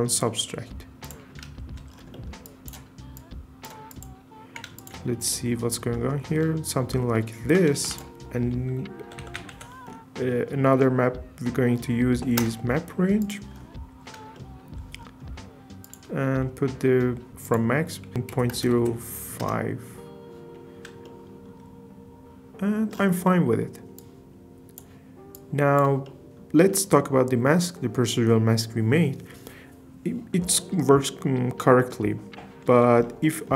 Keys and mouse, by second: 3.2 click, 3.9 click, 4.8 ctrl+shift+drag, 5.3-6.1 middle drag, 7.8 shift+a, 13.3 drag, 13.3 typing, 15.9-17.3 drag, 17.6-19.5 drag, 23.2 middle click, 25.3 click, 26.0 middle click, 33.2 middle click.